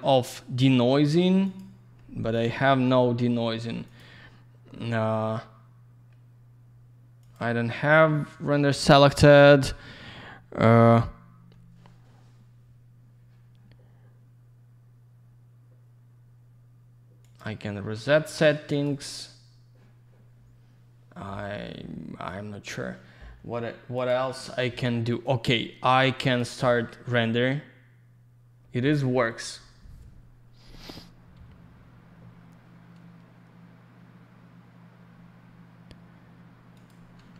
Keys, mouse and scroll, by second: 1.4 click, 1.5 click, 2.2 click, 2.3 click, 3.8 click, 3.9 click, 7.1 click, 7.3 click, 17.1 click, 17.3 click, 18.6 click, 18.8 click, 23.9 click, 24.0 click, 25.2 click, 36.7 click, 36.8 click.